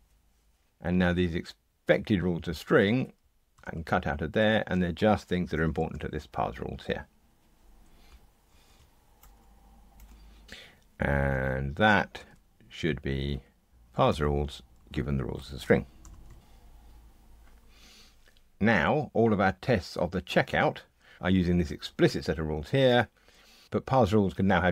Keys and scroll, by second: 3.5 super+x, 5.8 super+v, 8.5 ctrl+g, 9.2 Delete, 10.4 super+z, 12.1 super+c, 14.1 Return, 14.7 super+v, 16.0 ctrl+r.